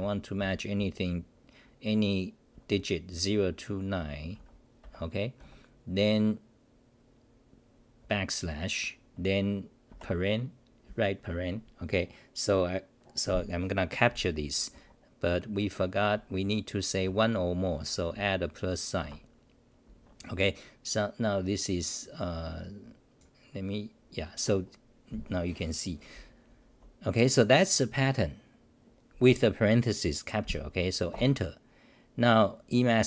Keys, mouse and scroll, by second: 0.0 u, 4.3 Left, 14.8 Home, 15.9 Left, 17.1 Right, 26.5 n, 31.1 Return.